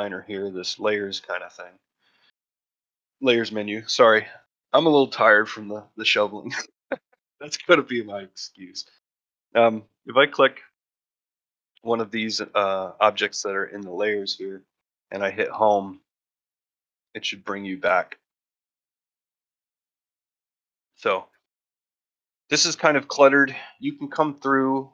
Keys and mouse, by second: 15.7 Home, 17.3-19.3 middle drag, 19.5 shift+middle drag, 19.8 middle drag, 20.2 shift+middle click, 20.5 ctrl+middle drag, 20.9 shift+middle click, 21.2 middle drag, 21.6 shift+middle drag, 22.3 middle drag.